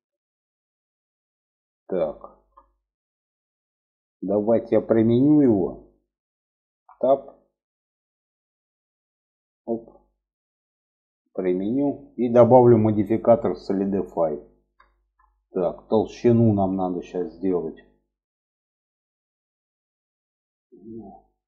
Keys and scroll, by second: 6.0 Tab.